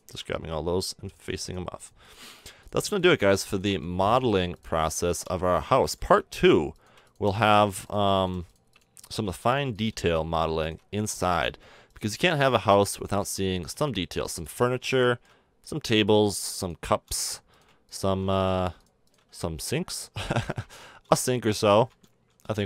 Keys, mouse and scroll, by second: 0.7 f, 2.3 f, 3.7 f, 5.1 f, 5.4-8.3 middle drag, 8.6 right click, 9.2-10.9 drag, 9.2 f, 10.9 f, 11.2 middle click, 13.2 f, 14.7 f, 16.9 f, 19.2 f, 20.0 ctrl+z, 22.3 f.